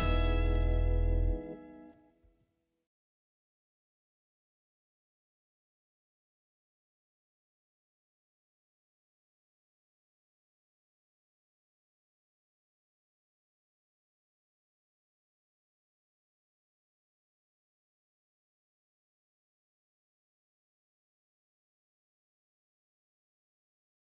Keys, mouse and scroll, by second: 3.0 click, 3.6-4.1 scroll up 1, 4.1 click, 4.8-5.1 scroll down 1, 5.4 click, 6.4-6.9 scroll up 1, 6.9 click, 7.9 click, 8.9 ctrl+c, 9.4 ctrl+v, 9.9 click, 11.7-12.2 scroll up 1, 12.2 click, 13.4 click, 15.1 click, 16.6 right click, 16.8 click, 17.8 click, 18.2 click, 18.2 right click, 19.0 click, 20.4 right click, 20.6 click, 21.1 ctrl+space, 23.7 scroll up 1, 23.8 click.